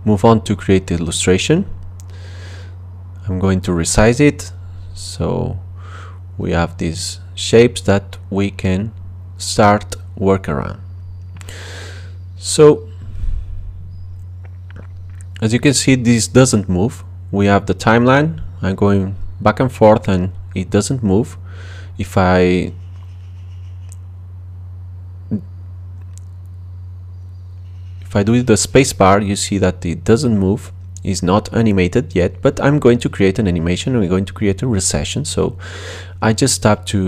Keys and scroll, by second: 19.3 space, 24.9 space.